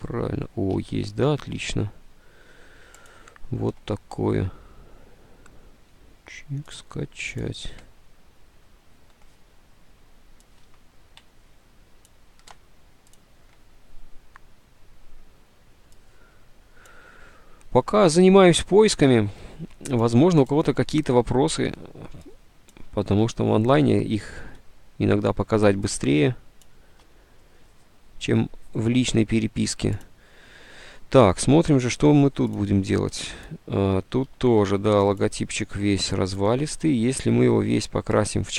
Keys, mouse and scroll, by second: 0.9 alt+Tab, 1.7 alt+Tab, 10.8 alt+Tab, 19.7 ctrl+u, 21.5 Delete, 21.5 ctrl+u, 23.7 Delete, 34.2 ctrl+z, 35.6 ctrl+z, 37.0 ctrl+z.